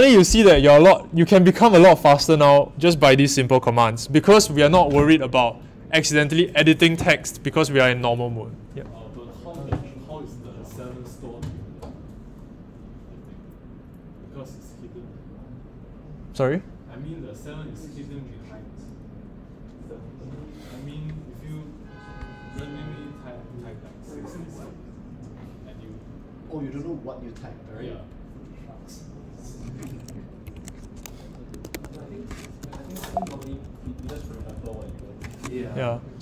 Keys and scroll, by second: 30.4 ctrl+alt+Right, 31.5-35.3 typing.